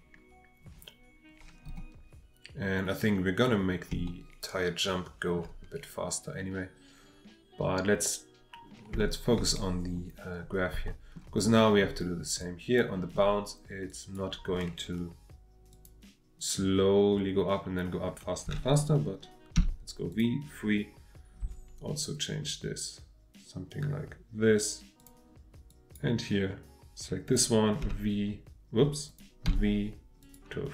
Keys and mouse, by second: 3.9-5.4 shift+middle drag, 9.0 shift+middle click, 10.9 shift+middle click, 12.4-12.9 drag, 15.7 click, 19.5 v, 21.4 g, 25.0 click, 25.7 drag, 27.2 click, 27.8 g, 29.1 click, 29.4 v.